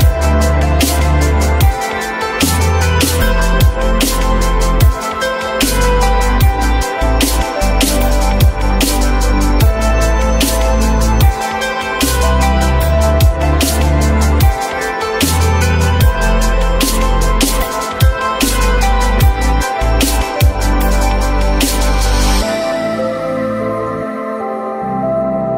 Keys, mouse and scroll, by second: 4.5 f, 5.3 z.